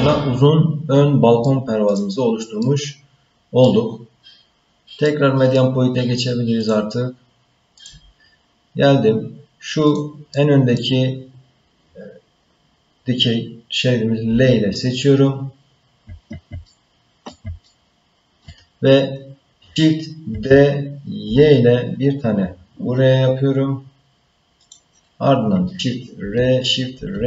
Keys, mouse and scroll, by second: 1.9 click, 2.4 scroll down 1, 2.6-3.6 middle drag, 3.9-4.9 scroll up 2, 5.1 middle click, 6.6-8.1 drag, 9.8 click, 10.3 middle click, 14.3 l, 15.3-16.0 scroll down 1, 16.6 ctrl+middle click, 17.6 shift+middle click, 20.3 shift+d, 26.2 shift+r, 26.9 shift+r.